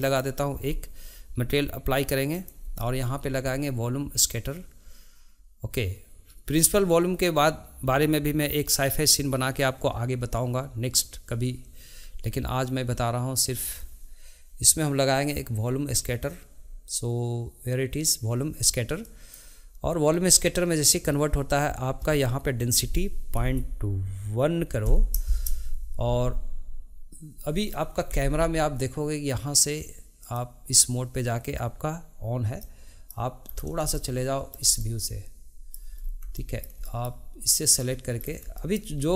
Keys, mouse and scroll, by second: 0.1-5.5 drag, 22.6-25.7 drag, 30.2 click, 32.6-33.5 middle drag, 33.5 scroll down 2, 33.9-35.9 shift+middle drag, 35.9 scroll up 2, 36.4-37.5 shift+middle drag, 37.5 click, 38.1 scroll down 2, 38.5-38.9 shift+middle drag, 38.9 scroll up 2.